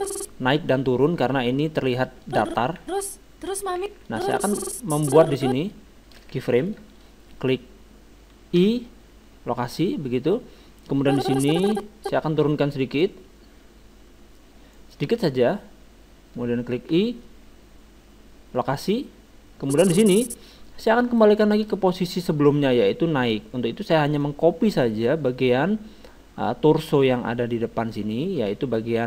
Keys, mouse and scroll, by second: 2.3-4.0 drag, 2.8 alt+a, 3.8 alt+a, 4.1-5.8 drag, 6.1-8.0 middle drag, 8.2-9.7 middle drag, 8.6 i, 11.0-12.7 drag, 13.1-14.8 drag, 15.4-17.1 drag, 16.9 i, 19.7-21.4 drag, 21.6-23.9 middle drag, 24.1-25.9 right drag.